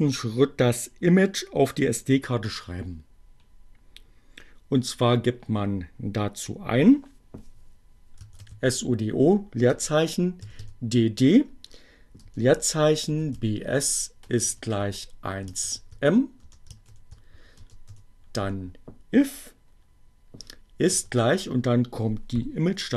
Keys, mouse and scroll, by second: 7.3-8.9 typing, 10.2 d, 10.6 space, 12.6-18.7 typing, 20.4 shift+0.